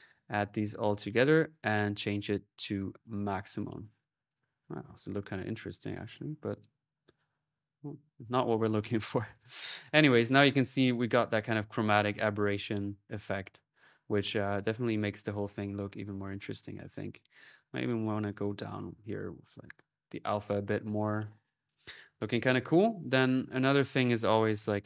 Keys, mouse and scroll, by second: 0.2 click, 1.5 click, 2.4-3.1 typing, 2.6 click, 4.1 click, 5.3 ctrl+z, 8.0 y, 8.7 click, 10.1 click, 10.6-11.6 right drag, 12.0-15.1 drag, 15.2 middle click, 15.4 click, 15.8 middle click, 16.0 click, 16.5 middle click, 16.7 click, 17.5-19.4 drag, 19.5 click, 20.5 ctrl+s, 21.4 ctrl+middle click, 21.7 ctrl+click, 22.3 ctrl+middle click, 22.6 click, 23.3 right click, 23.7 click, 23.7 right click, 23.7-24.8 typing.